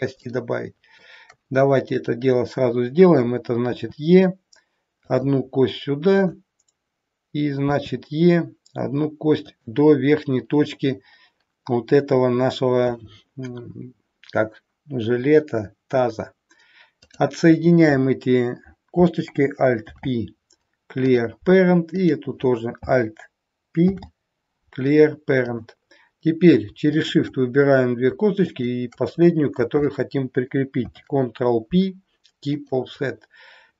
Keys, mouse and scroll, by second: 0.2 shift+middle click, 1.9 click, 3.7 e, 6.1 click, 7.6 e, 16.9 click, 19.7 alt+p, 22.0 click, 23.9 alt+p, 27.0 shift+click, 28.5 shift+click, 30.7 ctrl+p.